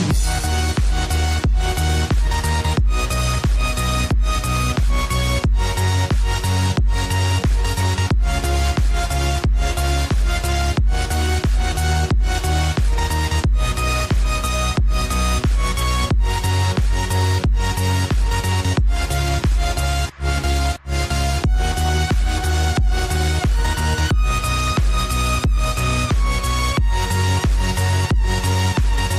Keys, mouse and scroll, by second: 2.8 click, 4.9-5.9 drag, 7.2 click, 9.4-11.0 drag, 11.4 click, 13.1 click, 13.7 click, 14.8 click, 17.7 click, 18.1 click, 18.7 Tab, 19.4 scroll up 1, 20.9-21.9 drag, 22.8 alt+click, 24.2 alt+shift+click, 26.6 ctrl+b.